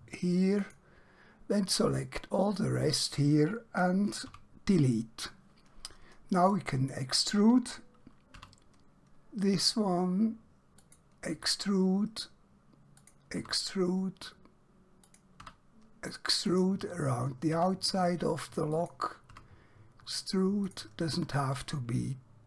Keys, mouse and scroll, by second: 0.7 click, 4.3 x, 4.8 click, 8.5 e, 10.9 click, 11.4 e, 13.1 click, 13.5 e, 15.1 click, 15.5 e, 16.5 click, 17.6 e, 18.8 click, 19.4 e, 20.7 click, 21.2 e.